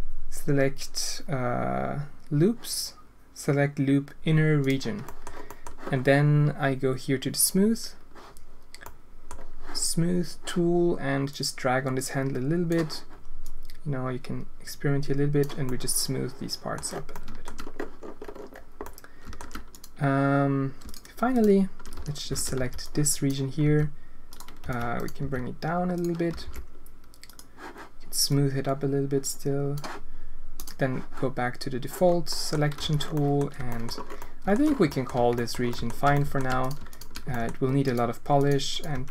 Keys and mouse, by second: 5.0 drag, 5.4 click, 7.3 click, 8.8 click, 11.3-12.6 drag, 13.4-15.4 drag, 15.6-16.7 middle drag, 17.1-17.4 alt+shift+drag, 18.8 click, 19.7-20.8 drag, 21.3 shift+click, 21.9 z, 22.3 alt+a, 22.5 b, 23.6 g, 24.6 b, 25.1 g, 26.4 alt+s, 28.3-29.7 drag, 32.3 click, 32.7 z, 33.1 click, 33.5 Tab, 33.7 click, 34.1 alt+shift+click, 34.8 click, 35.1 Tab, 35.3 click, 35.6 alt+shift+click, 36.1 alt+shift+click, 36.9 shift+click, 37.2 g, 38.4 click, 38.9 g.